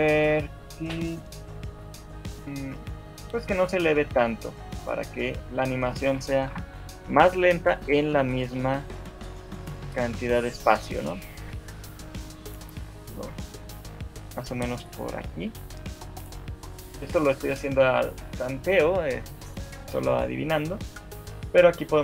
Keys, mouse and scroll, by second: 0.1 shift+middle click, 2.3 shift+middle click, 5.3 shift+click, 5.7 shift+click, 6.7 Delete, 8.1 right click, 8.7 shift+middle click, 9.7-10.7 scroll up 2, 10.7 click, 11.5 g, 13.3 scroll down 4, 13.5 shift+middle click, 14.3 scroll up 2, 15.3 g.